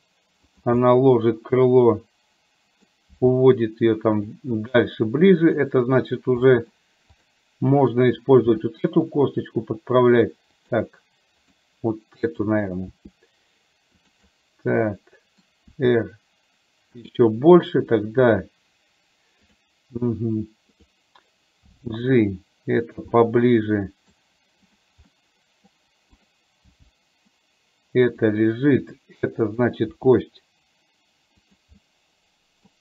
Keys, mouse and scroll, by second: 0.9-2.9 middle drag, 3.3 g, 5.7 click, 6.5 middle click, 8.5 r, 11.5 click, 12.4 click, 13.0 r, 14.4-15.5 middle drag, 15.8 r, 17.7 click, 19.5 click, 21.8 g, 23.3 middle click, 24.8 click, 25.2 middle click, 26.3 click, 26.8 g, 29.4 middle click, 30.0 r, 31.9 middle click.